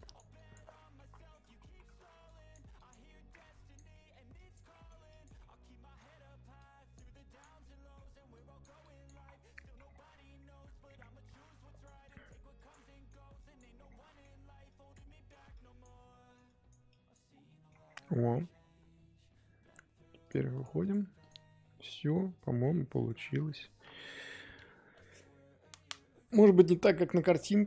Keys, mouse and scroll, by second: 0.7 middle click, 1.5 ctrl+z, 1.6 ctrl+z, 2.2 click, 3.0 middle click, 3.5 click, 3.9 middle click, 4.3 click, 4.7 middle click, 5.1 click, 5.4-6.5 middle drag, 6.5-7.5 drag, 7.5 middle click, 8.3 click, 9.2-9.5 scroll down 1, 9.5 middle click, 9.9 scroll down 1, 10.3-11.3 scroll up 12, 10.8 middle click, 11.3-12.8 drag, 12.8 middle click, 13.4 click, 13.8 scroll down 2, 14.0 middle click, 14.3-14.6 scroll up 2, 14.6 click, 15.0 middle click, 15.5 click, 16.1 middle click, 16.4 click, 17.3 scroll down 2, 17.4 middle click, 17.7 scroll up 1, 18.0 middle click, 18.4-19.4 scroll down 1, 20.2-21.2 drag, 22.0-23.2 middle drag, 23.2 scroll up 3.